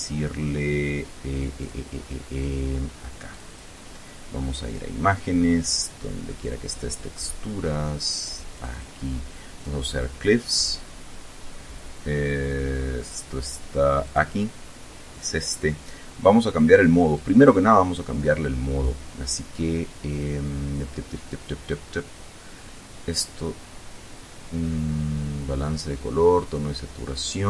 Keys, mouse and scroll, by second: 1.1 click, 2.8 click, 4.1 click, 6.1-6.8 scroll down 4, 8.1 click, 9.8-10.3 scroll down 1, 10.4-11.6 scroll down 2, 13.6 click, 14.7 click, 16.7 click.